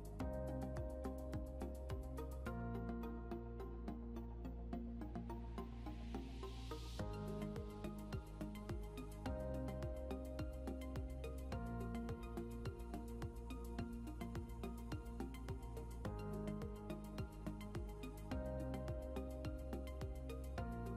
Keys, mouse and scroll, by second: 1.2 a, 10.9 F9, 13.8 click, 18.3 click.